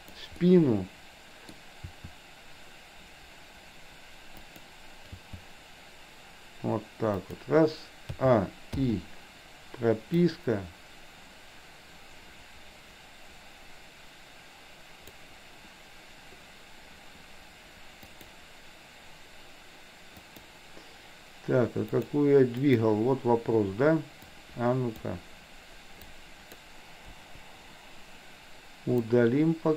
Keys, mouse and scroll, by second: 0.4-1.5 middle drag, 1.5-1.9 scroll down 1, 1.9 r, 5.2 g, 8.2 a, 8.9 i, 10.3-15.2 drag, 18.2 click, 20.3 click, 21.8 click, 22.7 click, 24.4-25.2 drag, 26.2-26.7 drag, 27.2 Delete, 29.2-29.7 drag.